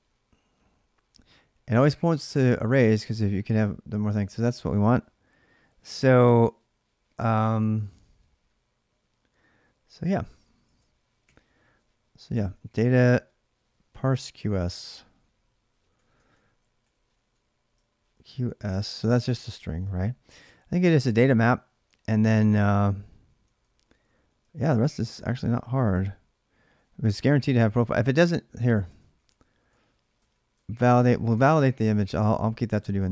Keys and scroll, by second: 10.4 ctrl+a, 11.0-20.8 typing, 23.2-25.8 typing, 28.6-32.5 typing, 30.4 ctrl+[.